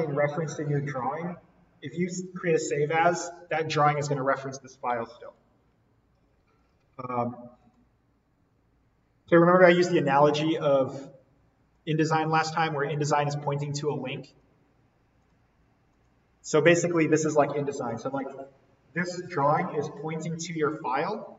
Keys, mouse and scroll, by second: 5.2 click, 10.8-15.2 drag.